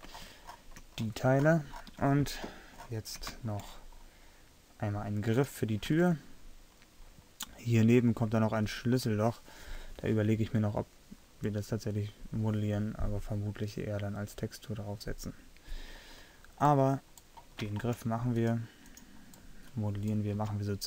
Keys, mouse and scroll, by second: 5.5 middle click, 6.1 Tab, 6.1-7.4 drag, 17.4 middle click, 18.4-19.7 middle drag, 19.8 middle click, 20.5 a.